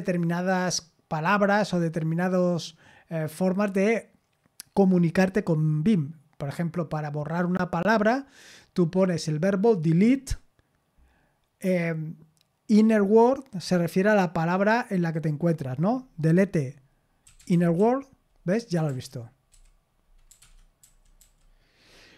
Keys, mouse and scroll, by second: 17.0-21.2 typing, 18.7 Escape, 20.4 Escape.